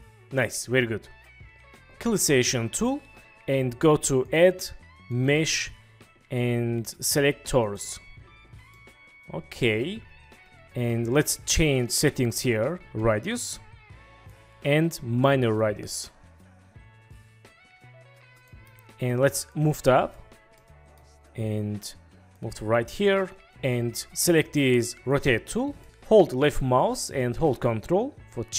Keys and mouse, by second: 4.2-7.8 drag, 8.8-10.9 drag, 13.0-14.3 drag, 15.6-18.5 drag, 18.6 click, 19.5 drag, 20.7-21.0 drag, 23.2 click, 25.1 click, 25.8 ctrl+z, 26.9 click.